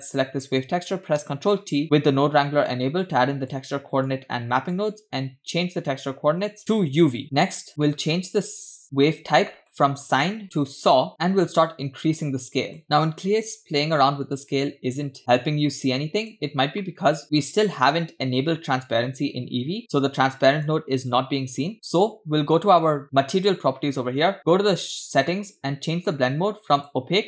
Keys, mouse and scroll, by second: 1.6 ctrl+t, 3.1-3.8 drag, 4.1 click, 6.8-7.2 drag, 7.2 middle click, 7.9 middle click, 9.0 middle click, 9.1-9.5 scroll up 2, 9.5 middle click, 10.1-16.3 drag, 16.8 middle click, 17.2-17.5 scroll up 2, 17.6 click, 18.8-20.7 drag, 21.7 middle click, 22.0-22.5 scroll up 1, 23.0 click, 24.4-25.0 scroll down 4, 26.8-27.2 drag.